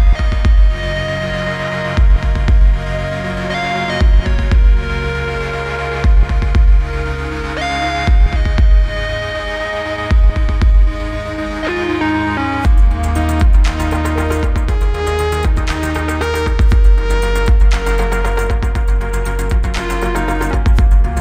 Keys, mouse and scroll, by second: 1.8-2.2 click, 4.2 scroll up 1, 5.1 click, 6.5 right click, 7.4 click, 8.6 click, 9.0-10.3 typing, 11.0 click, 13.1 click, 14.1 click, 17.0 right click, 18.5 click, 19.5-21.2 typing.